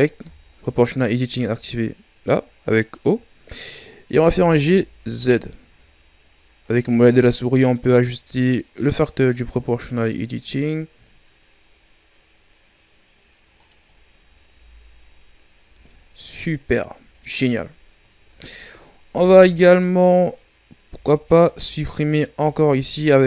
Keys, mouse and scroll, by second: 0.2 o, 4.3 g, 13.8-14.4 scroll down 5, 14.4 Tab, 15.0-15.6 scroll down 3, 15.6 a, 17.1-18.3 shift+scroll up 8, 18.3-19.0 shift+scroll down 2, 19.0 Tab, 21.2 alt+right click, 23.0-23.2 alt+shift+right drag.